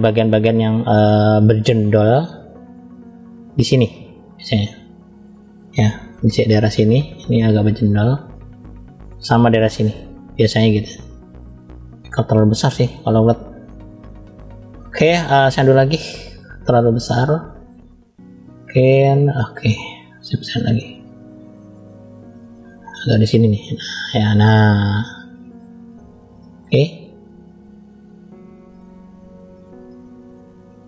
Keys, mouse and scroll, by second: 2.4 f, 4.0 click, 6.6-9.4 drag, 11.6-12.0 scroll up 2, 12.5-13.5 scroll down 2, 12.8 middle click, 15.1 click, 16.9 middle click, 18.6 click, 20.1 f, 21.6 click, 23.5 click, 24.6 click, 26.0 click, 26.8 click, 27.2-28.0 scroll up 1, 28.0 scroll up 1, 28.2 f, 29.4 click.